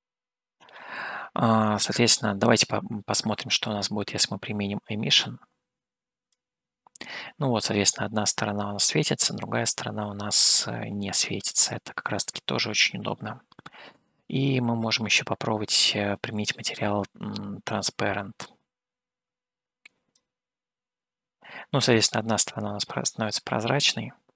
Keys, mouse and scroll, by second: 3.8-6.4 drag, 9.4-14.4 middle drag, 19.0-20.6 drag, 23.0-24.3 middle drag.